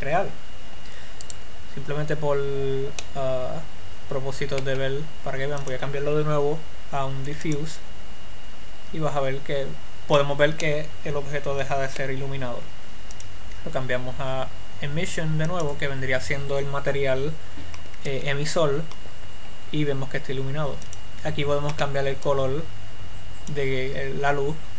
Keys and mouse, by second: 2.0-3.6 right drag, 3.6 middle click, 6.2-8.0 drag, 11.1-14.1 middle drag, 14.1-16.6 drag, 21.3-23.0 drag.